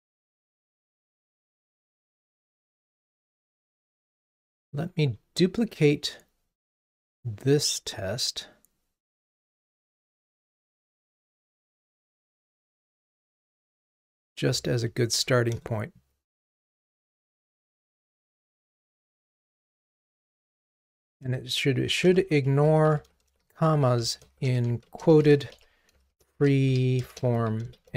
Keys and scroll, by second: 4.7 alt+Up, 14.5 super+d.